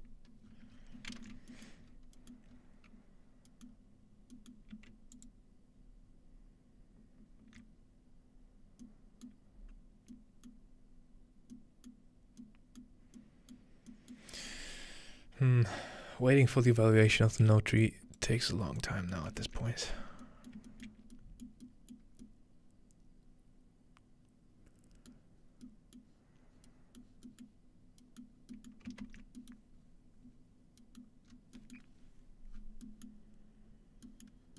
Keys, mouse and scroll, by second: 0.4-1.9 scroll down 3, 1.9-3.3 scroll up 5, 3.3 scroll down 1, 5.1 alt+shift+click, 9.3-10.1 middle drag, 10.5-11.5 middle drag, 11.9-12.4 middle drag, 12.8-13.2 middle drag, 13.1-14.9 scroll up 1, 13.6 middle click, 14.2-15.5 middle drag, 17.8-18.3 drag, 18.4 g, 18.8 click, 19.1 middle click, 19.4 ctrl+space, 19.7-20.2 ctrl+middle drag, 20.5 ctrl+shift+middle click, 20.9 ctrl+shift+middle click, 21.0-22.0 scroll down 1, 22.0 middle click, 22.0 scroll up 1, 24.3-25.1 scroll up 1, 25.1-25.6 scroll up 1, 25.2-25.7 middle drag, 25.6-26.9 scroll down 1, 26.0 middle click, 26.9 scroll up 1, 27.9-28.4 scroll up 4, 28.4 scroll down 2, 29.8 scroll up 1, 30.4-32.5 scroll up 1, 32.5-33.5 scroll down 1, 34.3-34.5 scroll down 2.